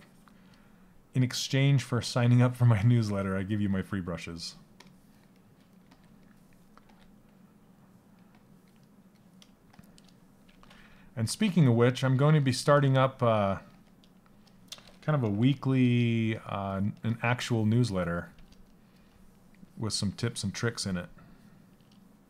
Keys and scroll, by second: 10.0 ctrl+z, 11.0 s, 13.2 s, 14.9 ].